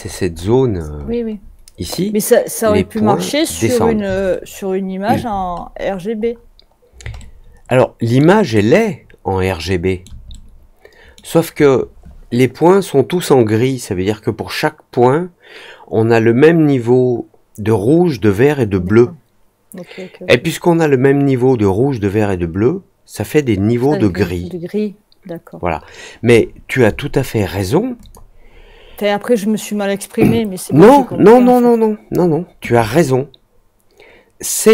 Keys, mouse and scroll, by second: 0.6-1.5 scroll down 3, 4.2 alt+middle click, 5.3-5.9 scroll down 2, 6.1-6.8 scroll up 2, 7.1-8.1 alt+middle drag, 8.5-10.0 alt+middle drag, 10.2 middle click, 27.9 click.